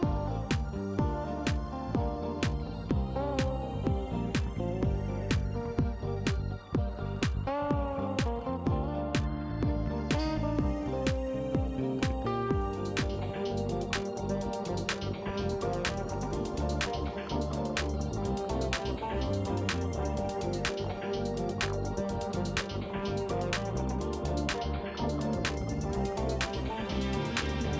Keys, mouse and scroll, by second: 1.2-2.3 drag, 3.2 click, 4.6 click, 7.3 KP_3, 7.5 KP_5, 8.0 KP_Enter, 9.2-10.9 drag, 11.2 middle click, 12.6 click, 13.7 click, 16.1 KP_5, 16.5 KP_Enter, 18.0 click, 19.9 click, 20.3 click, 20.8 shift+right click, 21.5 shift+middle click, 22.0 shift+right click, 23.7 click, 24.4 space, 25.9 click, 26.2 space.